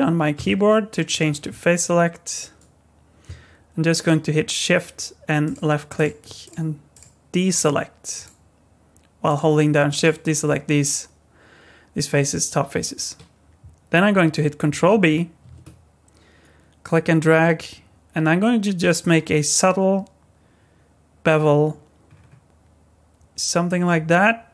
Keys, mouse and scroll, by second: 0.4 3, 5.4 shift+click, 6.0 shift+click, 6.4 shift+click, 6.9 shift+click, 7.5 shift+click, 8.2 shift+click, 9.3 shift+click, 9.9 shift+click, 15.4 ctrl+b.